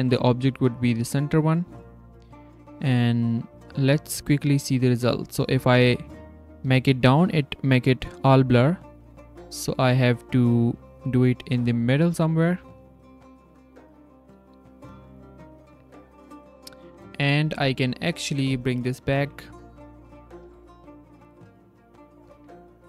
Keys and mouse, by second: 2.9-6.6 drag, 9.5 click, 10.2 click, 11.6 click, 12.8 click, 12.8 right click, 13.1 z, 13.7 click, 14.5-15.4 drag, 16.0-16.5 drag, 16.1-16.5 right drag, 16.8 s, 17.4 g, 20.3 g, 22.3 z.